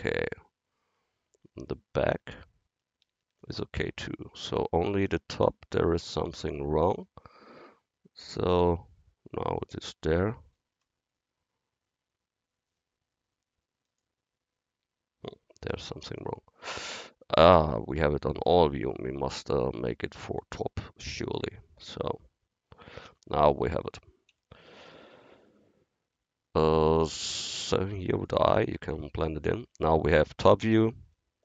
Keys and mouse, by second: 2.4 ctrl+KP_1, 4.5 KP_7, 8.2-10.1 drag, 10.2 KP_7, 10.8 KP_4, 10.8 KP_1, 15.5 drag, 17.6-19.4 drag, 23.1 KP_1, 24.3 KP_7, 26.2 KP_7, 30.1-31.4 middle drag.